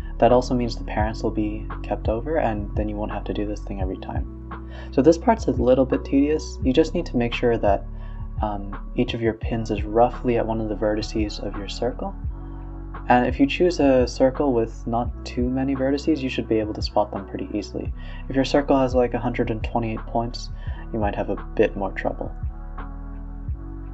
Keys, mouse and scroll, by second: 0.5 alt+d, 1.5 alt+d, 2.9 alt+d, 4.1 alt+d, 4.8 alt+d, 6.0 alt+d, 7.0 alt+d, 7.9 alt+d, 8.5 alt+d, 9.9 alt+d, 10.8 alt+d, 11.7 alt+d, 13.3 a, 13.4 a, 13.5 click, 13.8 r, 16.4 r, 18.7-19.4 middle drag, 19.4 scroll down 2, 19.7 middle click, 20.0 shift+a, 23.8-23.9 drag.